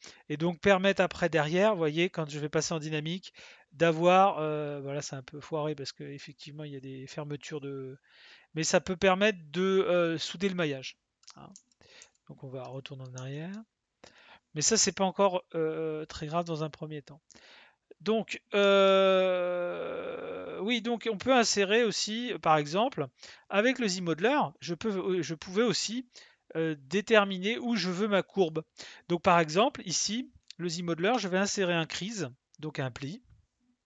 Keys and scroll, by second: 11.5 ctrl+z, 12.0 ctrl+z, 31.6 space.